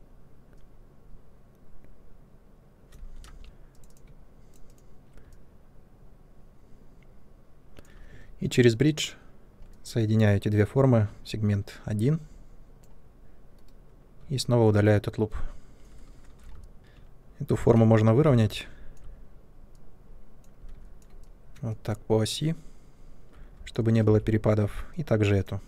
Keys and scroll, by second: 3.2 ctrl+z, 3.4 2, 12.7 2, 13.5 Delete, 16.2 shift+Tab, 18.2 r, 23.2 typing.